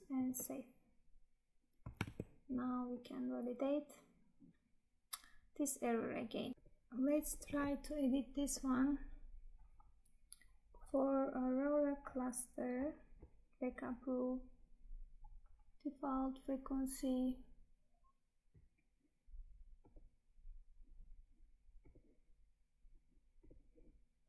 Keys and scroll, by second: 2.1 Tab.